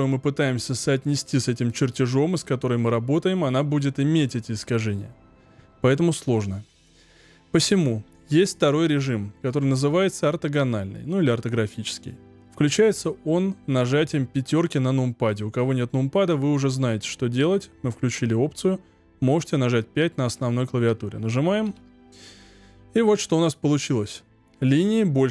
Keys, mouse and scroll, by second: 21.6 KP_5, 22.5-22.9 scroll down 6, 22.9-25.3 middle drag.